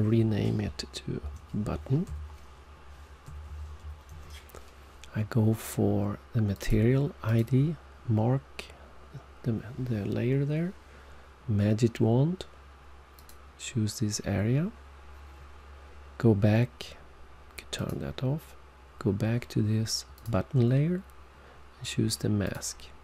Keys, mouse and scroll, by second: 3.5-4.3 typing, 6.5 click, 7.2 click, 13.1 click, 17.7 click, 20.1 click, 22.4 click.